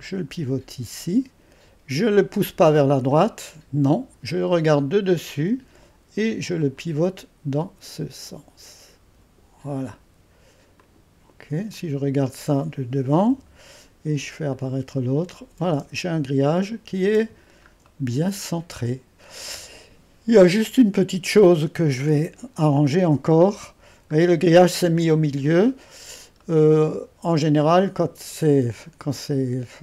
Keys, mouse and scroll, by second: 3.1-13.3 drag, 13.3 1, 14.5-15.8 drag, 14.8 space, 16.0-17.0 scroll up 1, 17.0 scroll up 1, 17.3-17.9 scroll down 1, 17.9-18.3 scroll down 1, 18.3 click, 19.2-19.9 scroll down 1, 23.3 2, 24.1-25.0 scroll up 1, 25.0-25.9 scroll up 1, 25.9-26.9 scroll up 1, 26.4-29.8 drag, 26.9-27.6 scroll up 1, 27.6-29.4 scroll up 1, 29.4-29.8 scroll up 1.